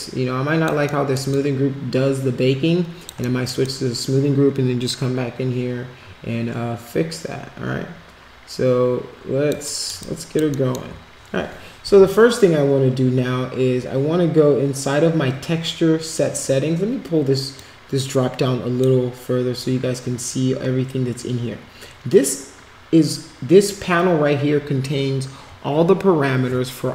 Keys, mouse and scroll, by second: 1.0 alt+middle click, 1.3-3.1 alt+drag, 3.3 alt+middle click, 3.6-9.5 alt+drag, 9.7 alt+middle click, 10.0 alt+click, 17.5-18.8 drag.